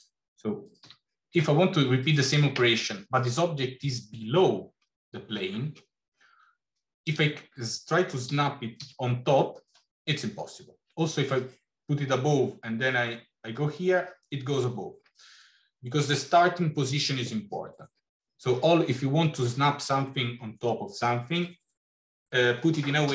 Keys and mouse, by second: 0.7 g, 7.0 click, 8.2 g.